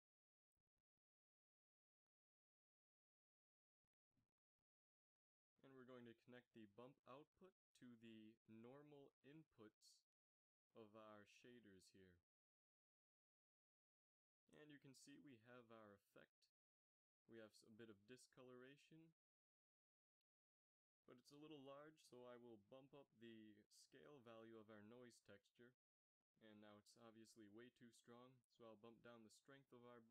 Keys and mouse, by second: 1.1-3.0 drag, 5.1 click, 12.9 g, 21.9-24.3 drag.